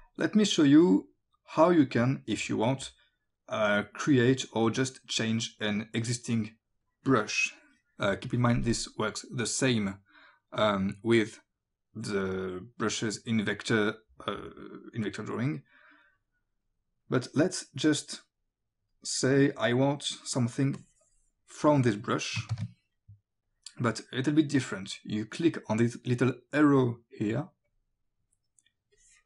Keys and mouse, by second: 0.7 click, 2.9 click, 4.9 click, 6.9 click, 12.9 click, 16.2 click, 19.9 click, 22.5 ctrl+z, 23.5 click, 27.7 click, 29.0 click.